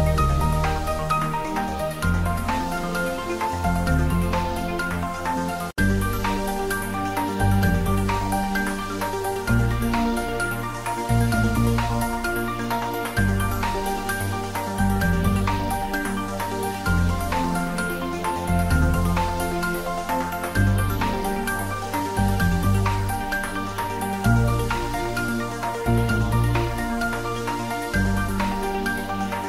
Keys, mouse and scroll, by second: 0.8 click, 2.0 g, 2.8 click, 3.0 shift+z, 3.6 s, 4.9 click, 5.2 g, 5.9 click, 6.7 s, 6.8 x, 7.4 click, 7.7 g, 7.8 x, 8.1 Left, 8.8 click, 9.1 s, 9.9 click, 10.2 g, 10.6 Left, 11.2 click, 11.5-11.8 scroll down 1, 12.0 s, 13.0 click, 13.2 g, 14.2 click, 14.4 middle click, 15.3 scroll down 1, 15.5 shift+z, 15.8-16.4 scroll up 1, 16.4 Tab, 16.8 ctrl+r, 17.0 click, 17.6 ctrl+z, 17.9 scroll down 1, 18.2 Tab, 18.3 scroll up 1, 19.5 click, 21.6 click, 22.2 scroll up 1, 22.8 right click, 23.3 click, 28.3-28.6 scroll down 1, 29.2 click.